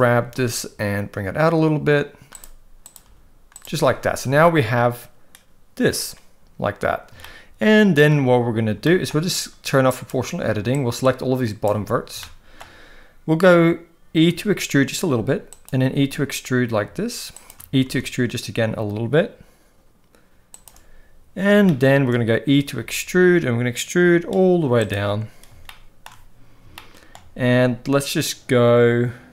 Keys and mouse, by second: 0.2 g, 3.0 g, 4.3 a, 7.2 shift+middle click, 8.8 shift+middle click, 9.9 click, 10.8 click, 12.2 shift+middle click, 14.3 e, 15.8 e, 17.8 e, 21.7 shift+middle click, 22.8 e, 26.8 shift+middle click, 27.6 g.